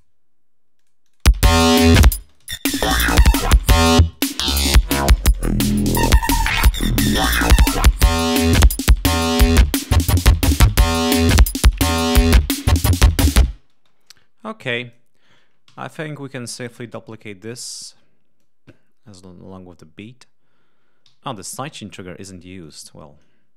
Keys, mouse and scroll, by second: 0.0 space, 0.7 click, 1.1 space, 2.1 ctrl+space, 2.8 ctrl+scroll down 2, 3.9 space, 3.9 click, 4.5-6.3 drag, 6.4 click, 7.7 Escape, 12.0 scroll down 2, 12.6-13.6 drag, 13.6 space, 14.5 click, 15.6 alt+d, 16.7-17.1 scroll up 2, 17.5 scroll down 2, 18.3 click, 18.9-19.5 scroll up 2, 20.9 alt+d, 22.1 ctrl+scroll up 2, 22.5 ctrl+click.